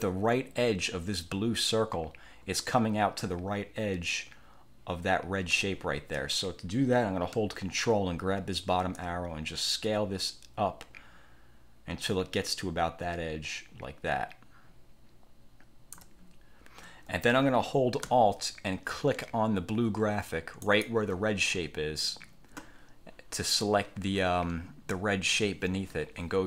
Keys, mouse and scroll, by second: 9.1-16.3 ctrl+drag, 20.7 alt+click.